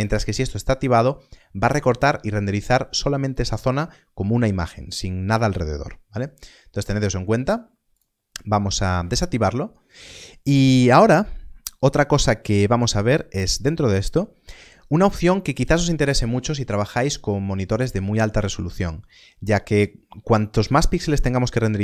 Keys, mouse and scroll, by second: 8.0 click, 13.3 click.